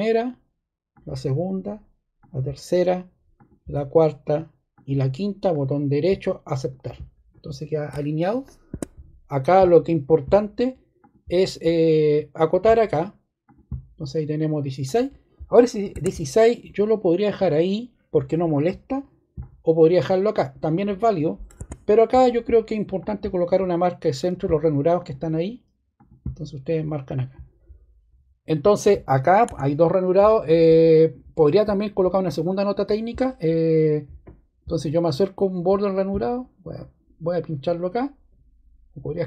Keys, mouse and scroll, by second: 0.9 click, 2.2 click, 8.6 ↺, 12.3 click, 13.4 click, 14.8 click, 21.5 ↺, 29.4 Escape.